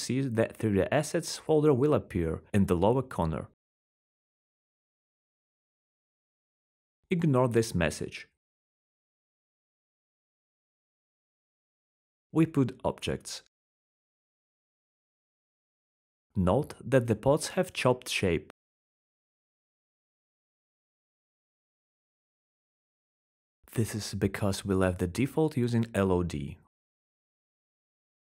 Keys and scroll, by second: 10.3-11.5 typing, 12.9-14.1 typing, 14.4 alt+3, 18.4 r, 19.6 w.